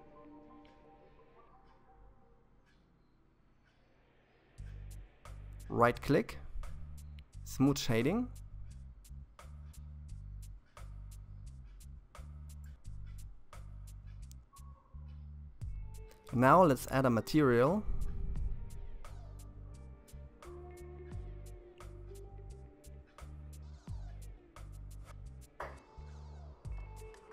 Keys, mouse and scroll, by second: 4.7-7.6 right drag, 7.6-8.1 scroll up 2, 8.2-11.1 middle drag, 13.3-16.4 middle drag, 21.6-25.4 middle drag, 25.4-25.8 scroll up 2, 25.8-27.1 middle drag, 27.1-27.3 scroll down 2.